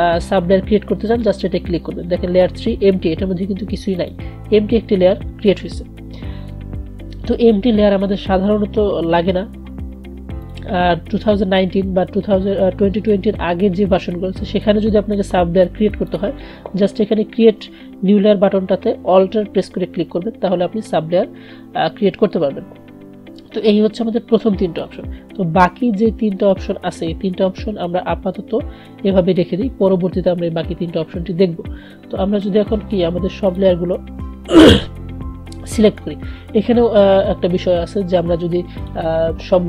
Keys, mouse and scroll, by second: 1.1 click, 4.0 click, 10.5 click, 16.2 click, 33.5 click, 39.0 click.